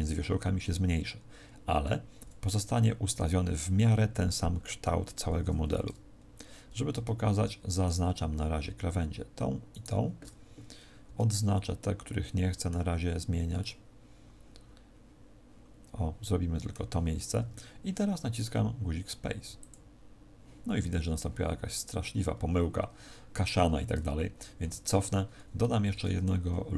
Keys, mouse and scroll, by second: 7.8 alt+shift+right click, 9.6 alt+shift+right click, 11.0 c, 19.4 click, 24.6 ctrl+z, 25.7 ctrl+r.